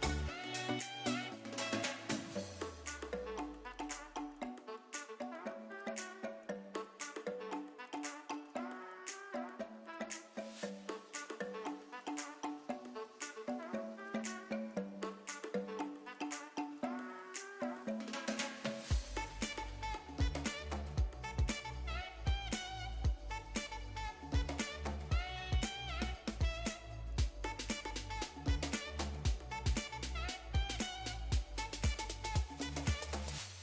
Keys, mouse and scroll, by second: 1.9 middle click, 5.6 click, 6.5 a, 7.4 u, 10.7 ctrl+space, 11.8 middle click, 12.6 click, 15.0 6, 16.6 click, 18.0 click, 19.3 click, 20.7 click, 23.2 click, 24.5 l, 26.9 g, 27.9 click, 28.2 r, 28.5 click, 28.7 g, 29.1 click, 29.7 click, 30.6 l, 31.4 r, 32.8 click, 33.0 g.